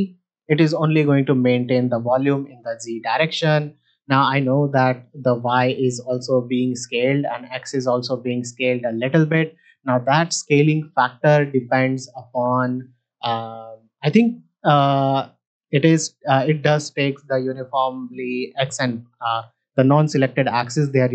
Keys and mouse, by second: 14.9 middle drag, 20.8 middle drag.